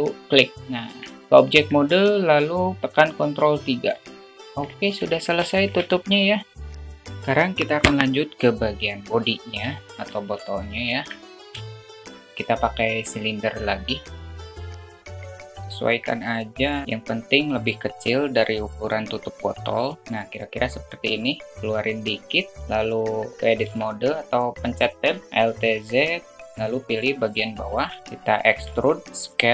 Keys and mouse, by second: 1.2 Tab, 1.9 middle click, 3.9 ctrl+3, 4.6-5.0 middle drag, 6.0 shift+middle drag, 6.4 `, 9.1 alt+click, 9.8 alt+shift+middle click, 10.9 shift+a, 13.8 alt+shift+middle click, 14.4 s, 16.6 click, 17.4-19.0 drag, 20.8-22.4 drag, 23.4 Tab, 25.3 alt+z, 26.3 click, 27.3 shift+middle click, 28.3 e.